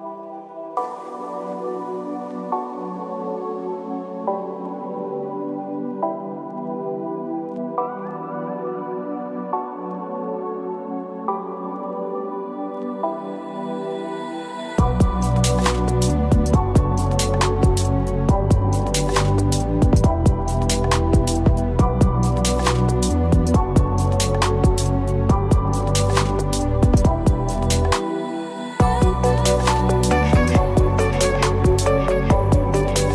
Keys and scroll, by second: 31.2 ctrl+Return.